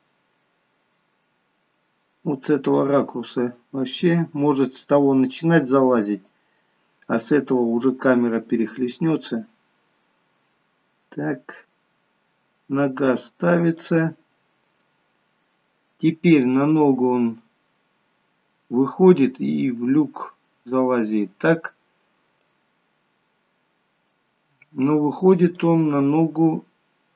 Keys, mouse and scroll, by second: 3.1-3.6 scroll up 4, 8.2 click, 14.2-15.0 scroll up 4, 20.9-21.9 scroll down 2, 22.7 click.